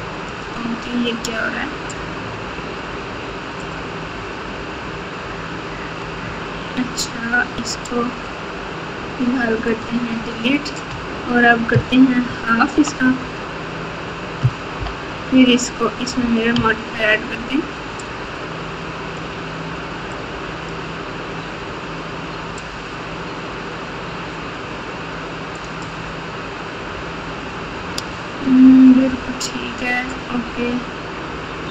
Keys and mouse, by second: 0.3-2.2 drag, 4.1 Tab, 6.2 Tab, 9.7-10.7 drag, 12.2 ctrl+KP_2, 12.7 ctrl+KP_2, 12.8 ctrl+KP_2, 14.7 ctrl+KP_8, 16.5 alt+z, 18.0-19.1 drag, 20.4 click, 22.6-25.5 drag.